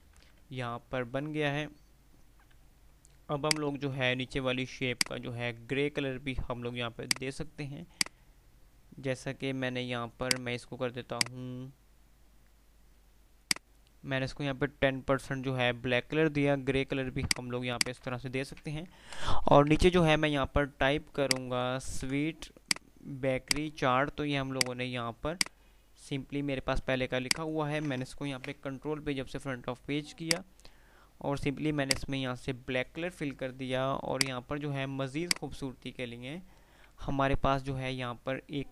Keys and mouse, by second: 0.0-1.0 typing, 0.0 F3, 1.9 F3, 2.9 F2, 4.3 typing, 5.2 click, 15.5 F3, 17.2 click, 18.6 ctrl+g, 19.0 Delete, 20.2 ctrl+z, 21.3-21.9 click, 22.3 ctrl+z, 22.7-27.2 drag, 27.2 F2, 27.2 click, 27.6 F2, 28.5 shift+Page_Up, 30.5-33.3 drag, 33.3 F3, 34.0-36.0 drag, 37.2 F3, 37.9 F2.